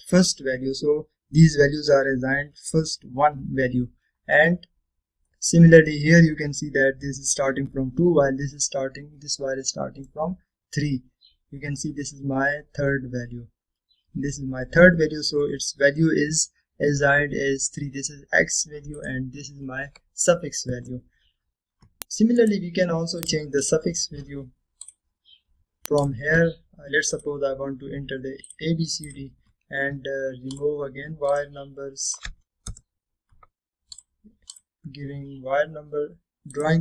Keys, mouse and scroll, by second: 2.1-4.2 scroll up 2, 5.2-5.7 scroll down 1, 6.4-7.2 middle drag, 7.7 scroll up 1, 9.3-9.8 scroll down 1, 10.4-11.3 middle click, 11.7-12.2 scroll up 1, 13.2-14.8 scroll down 1, 17.0-20.0 scroll up 2, 20.0-22.1 drag, 22.2-22.9 scroll down 2, 23.5 right click, 24.3 click, 33.8 Return, 35.0 click.